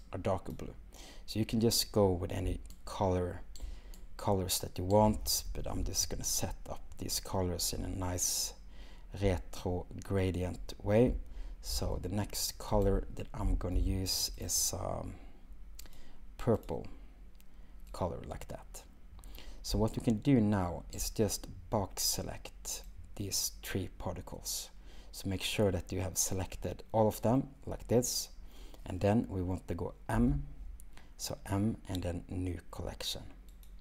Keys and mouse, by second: 13.4 g, 13.7 x, 15.8 click, 22.9 click, 30.2 m.